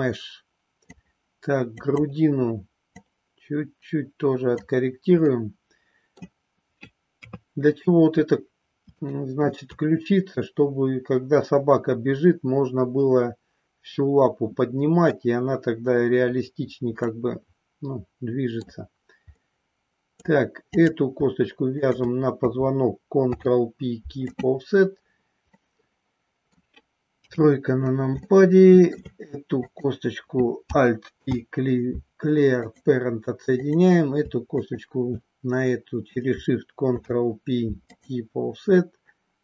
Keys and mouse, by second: 1.7 click, 2.9-4.6 drag, 5.2 middle click, 7.2 KP_3, 8.9 shift+middle click, 17.2-18.7 middle drag, 19.4 middle click, 21.7 shift+click, 23.2 ctrl+p, 25.5-26.7 middle drag, 27.3 KP_3, 28.2 shift+middle click, 29.7 click, 31.2 alt+p, 34.5 shift+click, 36.9 ctrl+p.